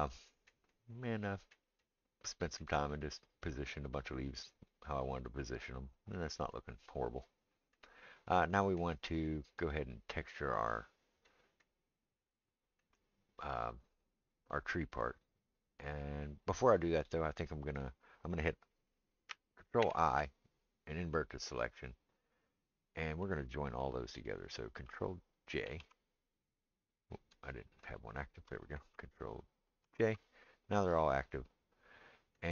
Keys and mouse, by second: 10.5 click, 10.7-27.9 middle drag, 19.8 ctrl+i, 25.7 ctrl+j, 27.9 shift+click, 27.9-32.5 shift+middle drag, 29.8 ctrl+j.